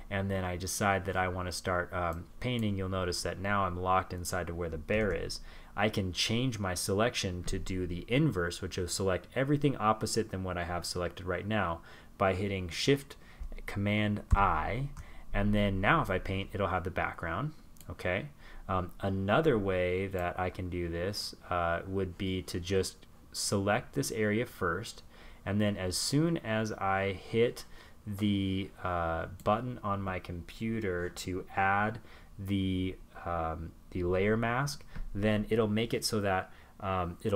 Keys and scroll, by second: 2.8 super+z, 12.1 shift+super+i.